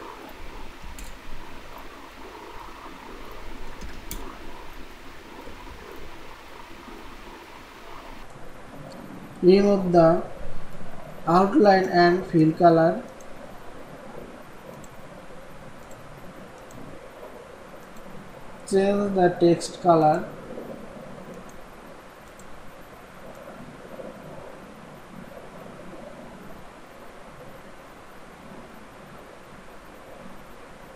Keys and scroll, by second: 5.7 ctrl+e.